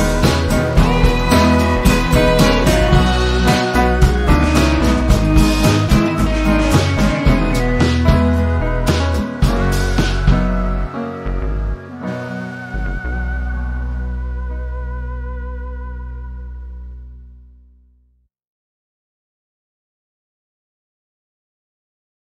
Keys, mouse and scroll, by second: 0.8 ctrl+scroll up 1, 1.6-1.9 ctrl+scroll down 1, 2.9 v, 3.1 click, 3.5 z, 4.2-5.4 drag, 5.5 v, 6.1 click, 7.5 ctrl+z, 8.5 shift+click, 9.1-10.3 drag, 13.0 i, 14.4 click, 15.4 v, 16.3-17.0 click, 18.5 z, 19.4-20.6 alt+drag.